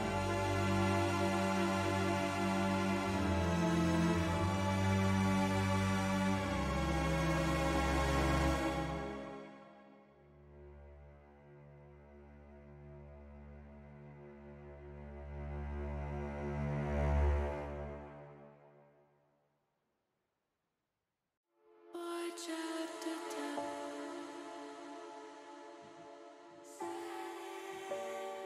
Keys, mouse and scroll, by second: 0.7 click, 1.0 middle click, 2.2 click, 3.1 click, 4.4 shift+middle click, 4.9 middle click, 5.8 s, 6.2 y, 8.0 click, 8.4 middle click, 9.7 shift+middle click, 10.3 middle click, 11.7 ctrl+r, 13.6 click, 14.6 ctrl+r, 16.9 click, 17.6 middle click, 18.3 middle click, 19.7 shift+middle click, 22.2-23.8 drag, 24.4 ctrl+z, 24.7 middle click, 26.1 click.